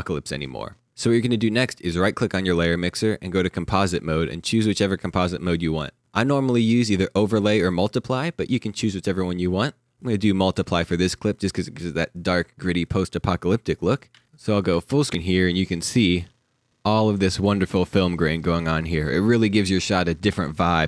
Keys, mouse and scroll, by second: 1.8 right click, 10.4 click, 10.4 right click, 14.1 ctrl+Num_Lock, 14.1 ctrl+f, 15.1 ctrl+f.